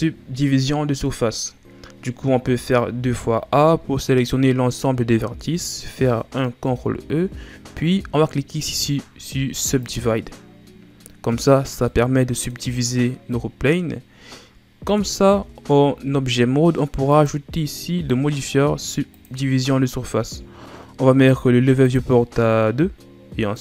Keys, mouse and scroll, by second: 2.3 a, 2.9 a, 6.6 ctrl+e, 11.9-15.2 middle drag, 15.2 Tab, 19.2 click, 21.8-23.6 drag.